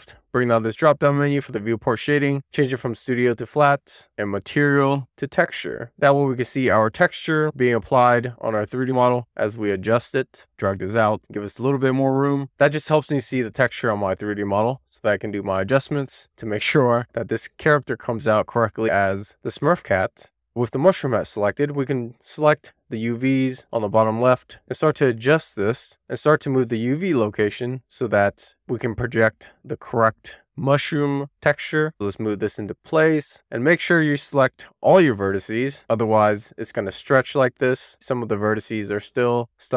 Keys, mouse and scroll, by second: 4.2-5.0 drag, 5.2-5.5 scroll up 1, 5.5 shift+middle click, 5.7 shift+scroll down 1, 5.9 middle click, 7.0-7.6 scroll up 2, 7.6 Tab, 8.2-8.5 scroll up 1, 8.5 scroll down 1, 8.8 shift+middle click, 11.1-13.3 drag, 14.7-15.2 scroll down 2, 15.4 shift+middle click, 15.9 middle click, 16.9-17.6 scroll up 2, 17.6 scroll up 1, 17.9 shift+middle click, 18.3-20.0 scroll down 1, 20.0 click, 21.8 click, 22.2 click, 23.0 middle click, 25.9 t, 28.0-28.8 drag, 29.4-29.8 drag, 31.0 w, 31.3-31.8 scroll up 2, 31.8-33.0 scroll down 1, 33.0 click.